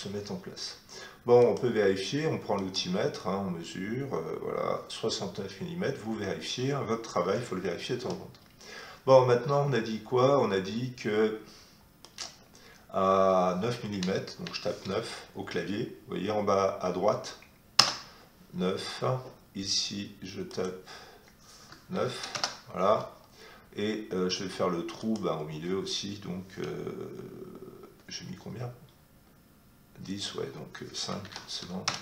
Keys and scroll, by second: 0.0 Escape, 7.2 Escape, 14.4 9, 17.7 Return, 21.9 9, 22.3 Return, 31.2 5, 31.8 Return.